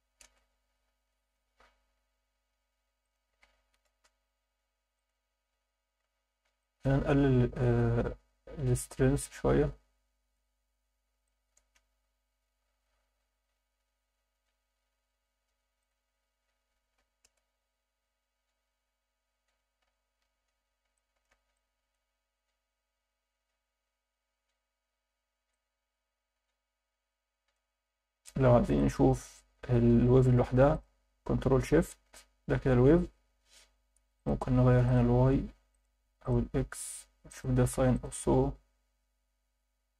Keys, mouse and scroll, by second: 3.0 click, 4.9-6.1 drag, 6.6 alt+shift+middle click, 8.9-10.4 drag, 11.2 alt+shift+middle click, 13.2-14.2 scroll down 6, 15.8-17.3 drag, 18.4 scroll down 2, 19.7-20.4 scroll up 3, 20.9 alt+shift+middle drag, 21.5-22.0 ctrl+alt+middle drag, 25.5-27.5 drag, 28.3 scroll down 2, 28.7 shift+middle click, 30.7 ctrl+shift+click, 32.1-32.9 scroll up 3, 33.3 scroll up 1, 34.2-34.9 drag, 35.7-36.3 drag, 37.3-38.0 drag.